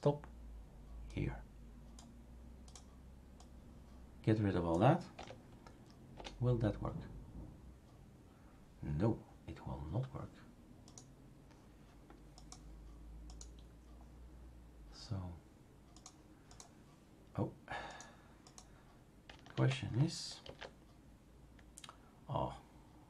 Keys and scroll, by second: 5.1 Delete, 6.1 Return, 19.5 ctrl+a, 20.4 ctrl+v.